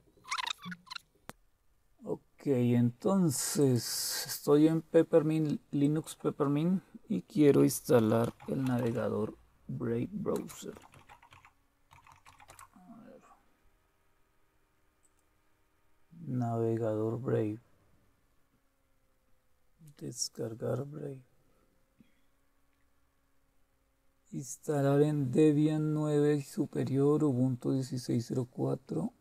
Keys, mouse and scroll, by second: 0.1 click, 0.3 click, 0.7 click, 3.6 click, 4.2 click, 5.8 click, 7.7-9.3 typing, 10.3-12.8 typing, 15.0 click, 15.4 typing, 18.0-19.3 scroll down 3, 19.3-20.2 scroll up 2, 20.2 click, 20.7-21.8 drag, 27.2-28.2 scroll down 3, 28.2-29.2 scroll down 1.